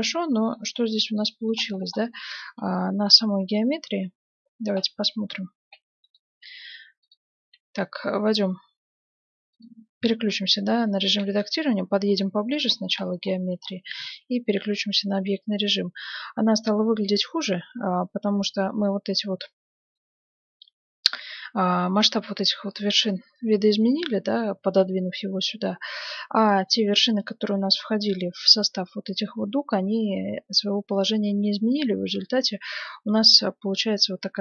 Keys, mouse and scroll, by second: 1.8-7.4 middle drag, 6.0-8.7 right drag, 6.3 Tab, 7.4 Tab, 8.3-10.4 middle drag, 8.5 click, 9.5 click, 9.5-11.3 right drag, 11.3 KP_Add, 12.1 scroll down 1, 12.3-13.3 middle drag, 13.6-16.7 middle drag, 13.9 Tab, 19.3-21.2 middle drag, 23.7-28.2 middle drag, 26.9 Tab, 30.9-32.6 middle drag, 32.6-33.3 scroll up 1, 33.3-34.4 middle drag.